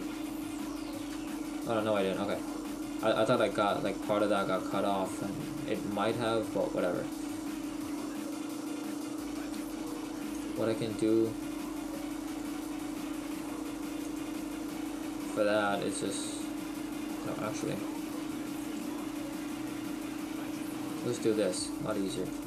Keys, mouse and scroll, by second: 1.3 shift+middle click.